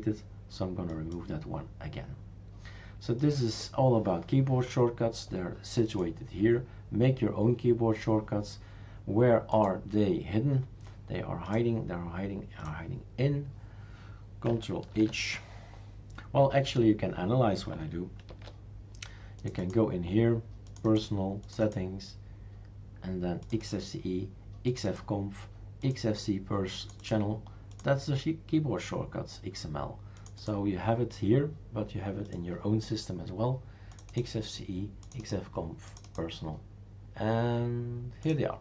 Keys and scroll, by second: 14.9 ctrl+h, 18.3 ctrl+h.